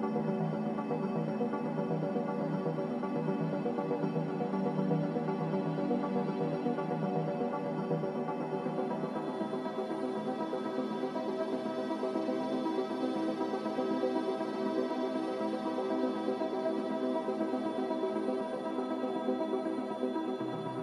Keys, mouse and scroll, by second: 10.7 ctrl+z, 20.2 ctrl+z, 20.6 ctrl+z.